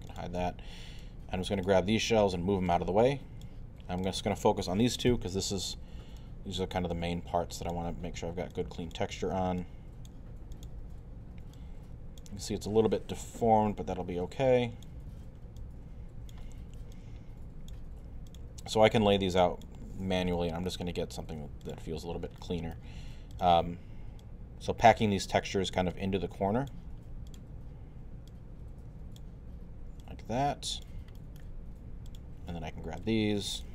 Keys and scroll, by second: 5.1 e, 7.7 w, 12.4 e, 15.1 w.